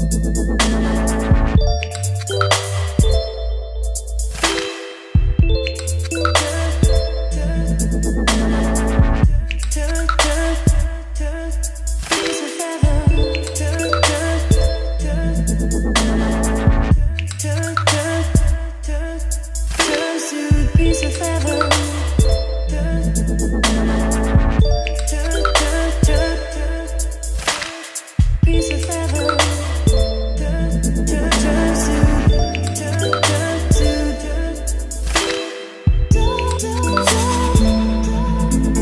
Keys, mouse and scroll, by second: 6.3-7.3 typing, 12.0-15.8 drag, 15.6-16.7 typing, 18.1-38.8 drag.